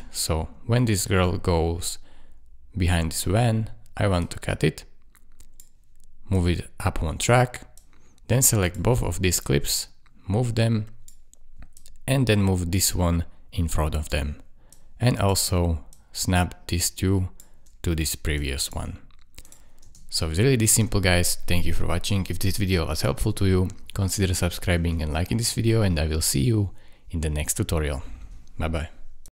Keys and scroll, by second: 19.8 space, 24.8 space.